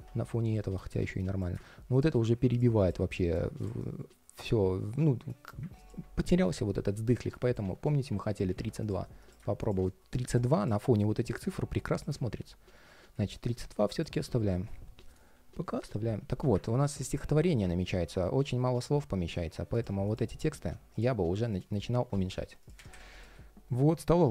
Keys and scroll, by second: 7.9 super+a.